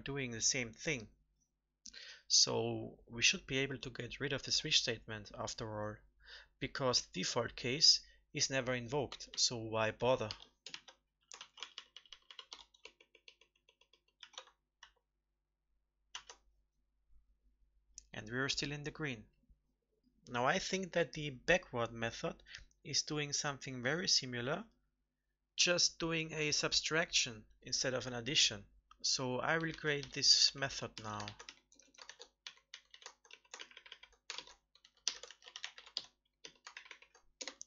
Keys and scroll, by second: 11.3 ctrl+x, 14.7 ctrl+v, 16.0 ctrl+s, 31.2 ctrl+c, 32.0 ctrl+v, 33.5 ctrl+Right, 33.7 ctrl+Right, 33.9 ctrl+Right, 34.3 ctrl+shift+Left, 36.7 ctrl+Right, 36.9 ctrl+Right.